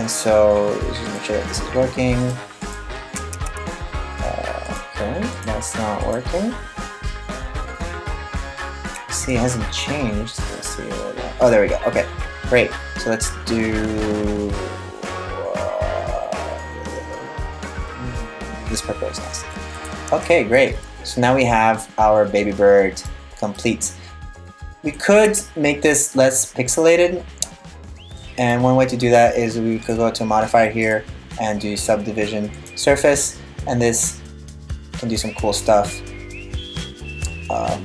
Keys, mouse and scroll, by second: 1.7 click, 1.9 click, 2.2 click, 2.9 Tab, 4.6 click, 5.0 click, 5.6 click, 8.5 click, 9.9 click, 19.5 right click, 19.7 Tab, 20.2 middle click, 23.2 middle click, 23.6-24.0 scroll up 1, 24.0 scroll down 2, 24.1-24.6 scroll down 1, 24.6 right click, 24.8 Tab, 25.5 middle click, 29.4 click, 30.4 click, 33.6 middle click.